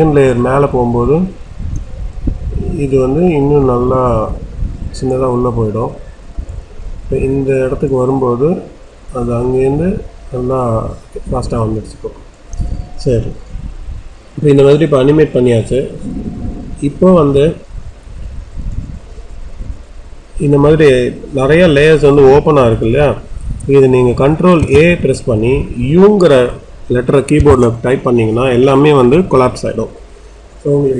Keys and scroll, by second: 27.3 u.